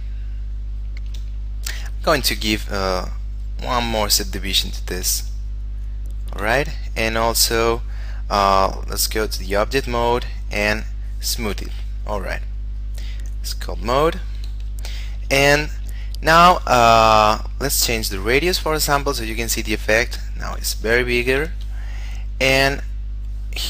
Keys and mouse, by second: 0.4 shift+middle click, 2.3 shift+space, 3.6 click, 5.0 shift+space, 6.1 shift+middle click, 8.9 click, 15.1 shift+middle click, 16.3 shift+middle click, 17.6 click, 21.0 ctrl+z, 22.5 click.